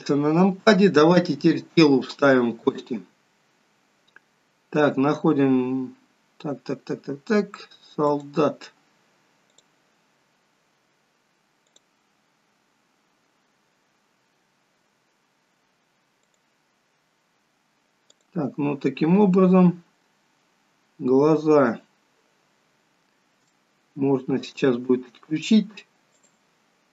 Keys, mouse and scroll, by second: 1.3 scroll down 2, 2.8-4.3 scroll down 1, 8.2 click, 9.7 click, 10.4-10.7 scroll down 2, 14.2 click, 16.5 click, 18.4 click, 21.8-23.6 scroll down 2, 23.6 shift+middle click, 25.0 scroll down 1, 26.4 click.